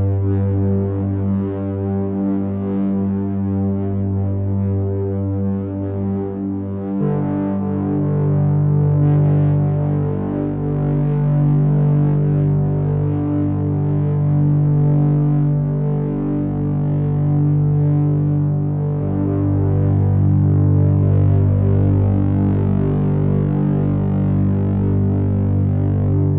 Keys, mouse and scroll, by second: 3.3 click, 6.4 click, 13.5 click, 14.2 click, 17.7 click, 19.5 click.